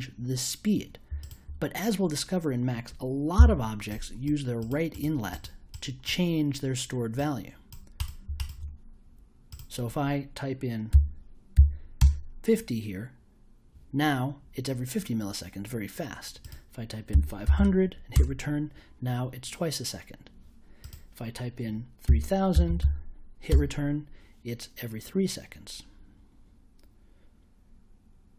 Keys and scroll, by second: 3.3 i, 10.9 5, 11.5 0, 11.9 Return, 17.1 5, 17.4 0, 18.1 Return, 22.0 3, 22.5 0, 23.5 Return.